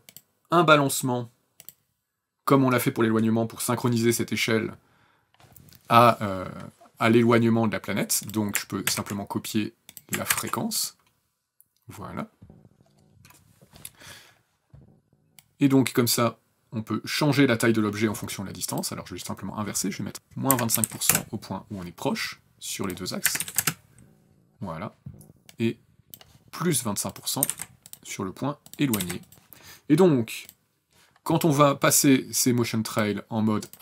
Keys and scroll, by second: 8.5 ctrl+c, 10.0 ctrl+v, 20.0 KP_Subtract, 20.2 KP_Subtract, 20.4 KP_2, 20.5 KP_5, 20.8 KP_Enter, 22.9 KP_Subtract, 23.1 KP_2, 23.2 KP_5, 23.3 KP_Enter, 27.1 KP_2, 27.2 KP_5, 28.6 KP_2, 29.3 KP_5.